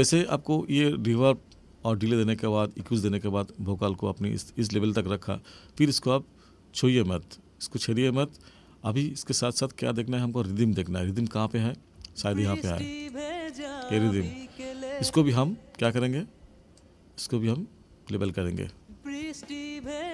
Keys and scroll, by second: 12.0 space, 15.0 space, 18.7 space.